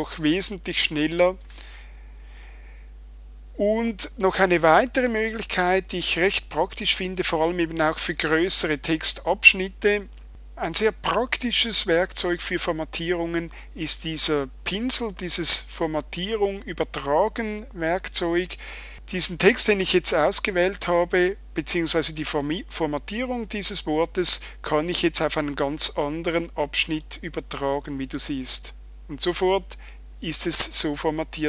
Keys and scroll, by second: 0.9 super+i.